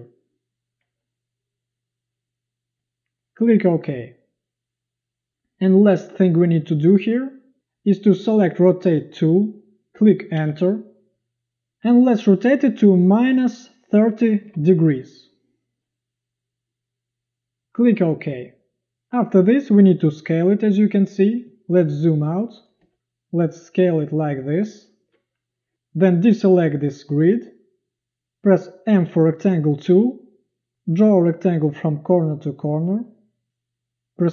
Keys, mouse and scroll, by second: 10.4 Return, 13.3-15.0 typing, 21.5 z, 22.3 space, 22.9 v, 28.9 m.